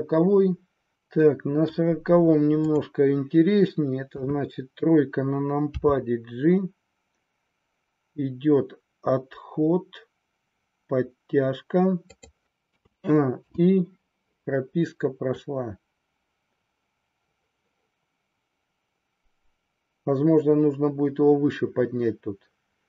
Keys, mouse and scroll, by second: 1.0 middle click, 4.2 KP_3, 5.8 g, 12.7 a, 13.6 i, 15.3-22.8 drag.